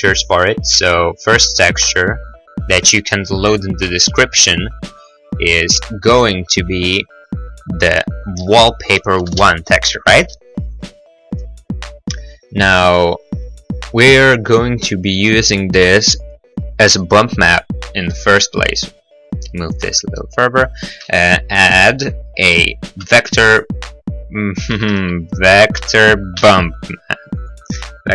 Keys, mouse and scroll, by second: 0.7 t, 0.9 i, 1.8 click, 4.6 click, 5.9 click, 6.9 click, 7.1 click, 8.4 click, 8.6 click, 9.2 Return, 18.0 g, 18.2 g, 19.7 click, 19.8 middle click, 20.0 middle click, 20.3 middle click, 20.6 middle click, 21.1 shift+a, 23.2 v, 23.4 m, 24.7 click, 24.8 x, 25.0 shift+a, 26.0 v, 26.5 b, 27.6 click.